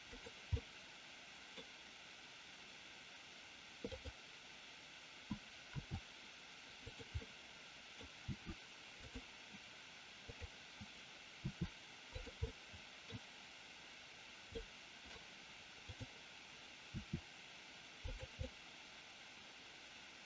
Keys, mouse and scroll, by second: 0.0 click, 0.6-1.6 middle drag, 4.0 click, 5.7 r, 6.8 click, 7.2-7.8 middle drag, 8.2 r, 9.0 click, 10.1-10.9 drag, 11.3 r, 12.1 click, 12.5-13.0 middle drag, 13.0 scroll down 1, 14.5-15.1 middle drag, 15.8-16.4 drag, 16.8 r, 18.1 click, 18.5-20.2 middle drag.